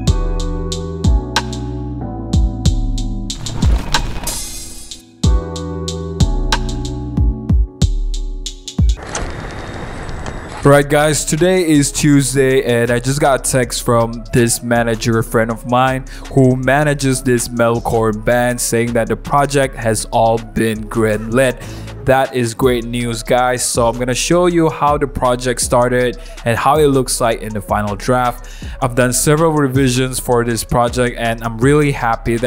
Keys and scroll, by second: 0.1 super+0, 0.1 super+-, 0.3 super+t, 0.7 Return, 0.8 super+t, 1.0 Return, 1.0 super+0, 1.0 super+-, 1.1 super+-, 1.1 super+z, 1.4 super+0, 1.4 super+-, 1.6 shift+a, 1.7 alt+super+e, 2.1 alt+super+e, 2.7 super+1, 2.8 super+0, 2.8 super+-, 2.9-3.7 typing.